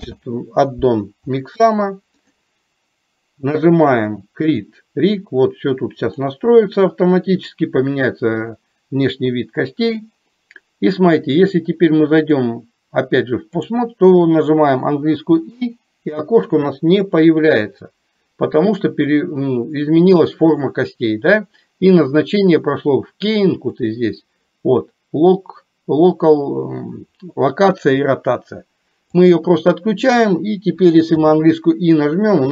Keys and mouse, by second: 4.1-8.2 drag, 12.3-13.9 drag, 23.9-29.8 drag.